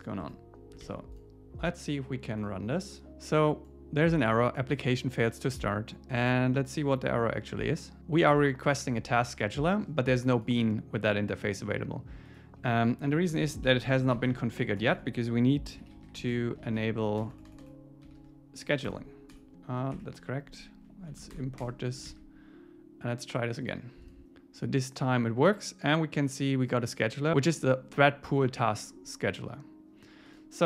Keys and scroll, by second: 0.2 Tab, 0.8 super+s, 13.1 Up, 13.3 Return, 13.7 alt+l, 18.9 Return, 21.1 Left, 21.3 alt+Return, 22.1 super+s.